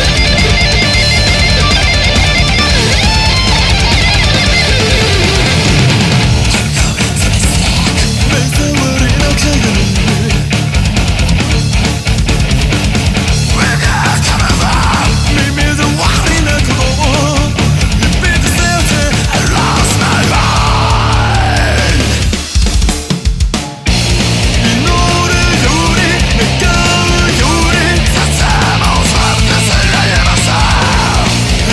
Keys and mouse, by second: 3.8 ctrl+z, 5.5 ctrl+z, 8.5 ctrl+z.